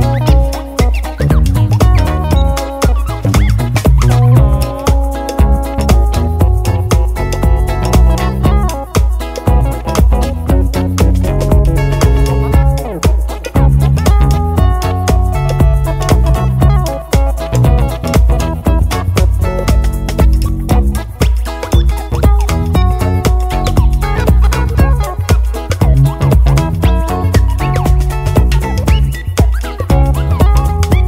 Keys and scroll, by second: 14.3 Left, 14.5 Left, 14.7 Left, 14.8 Left, 15.1 Left, 15.3 Up, 15.4 Up, 16.7 Left, 16.9 Up, 26.0 d.